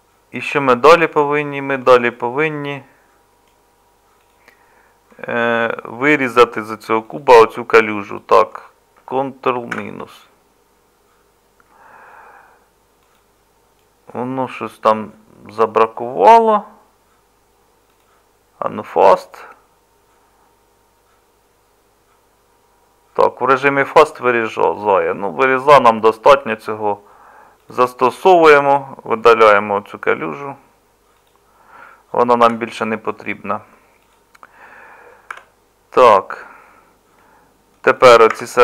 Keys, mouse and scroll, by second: 9.8 ctrl+KP_Subtract, 20.0-32.4 middle drag, 32.4 Delete, 35.3 KP_Divide, 38.3 Tab.